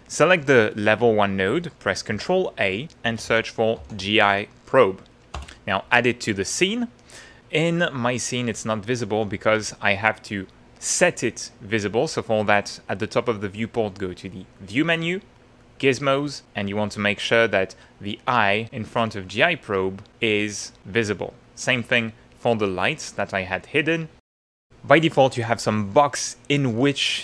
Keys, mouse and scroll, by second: 2.1 ctrl+a, 2.8-4.4 typing, 5.3 Return, 7.0 middle click, 7.2 click, 8.5 click, 9.7 click, 14.5 click, 15.6 click, 16.6 click, 18.1 click, 19.0 click, 21.4 click, 22.2 click, 23.6 click.